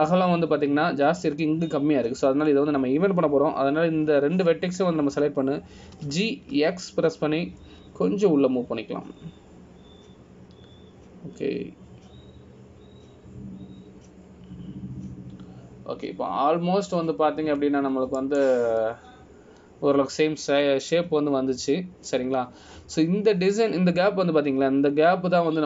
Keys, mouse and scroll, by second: 22.7 scroll down 2, 23.4 scroll down 1, 23.7-25.6 scroll up 1.